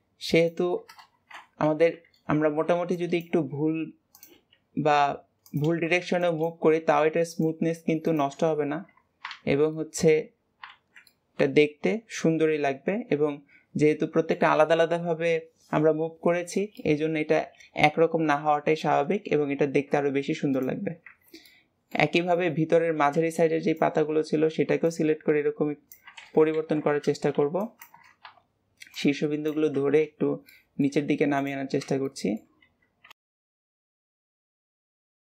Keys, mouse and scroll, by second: 9.6 middle click, 10.0 Tab, 10.6 alt+z, 10.9-14.0 middle drag, 16.6-19.7 middle drag, 20.4 click, 21.4-22.8 middle drag, 22.8 b, 24.7 click, 26.1 ctrl+z, 27.2 b, 28.8 click, 29.4 alt+z, 29.9 a, 30.4 middle click, 30.8 Tab, 31.2 click, 31.9 middle click, 32.5 alt+a, 32.9 b, 33.6 alt+a, 33.7 shift+middle click, 34.2 Tab, 34.3 click, 34.4 middle click, 34.5 alt+a, 34.8 click, 35.2 middle click.